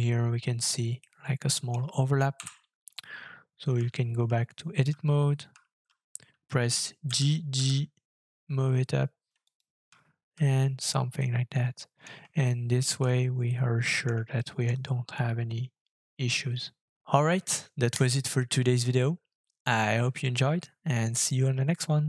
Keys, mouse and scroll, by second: 1.0 middle click, 2.3 KP_7, 3.0-3.7 scroll down 12, 4.2-4.9 Tab, 5.5 Tab, 7.0 g, 7.5 g, 9.9 Tab, 11.1 middle click, 12.4 shift+middle click, 13.5 middle click, 14.3 shift+middle click, 15.1-16.2 scroll up 5, 16.2-16.9 scroll down 2, 16.9 scroll down 1, 17.0 <.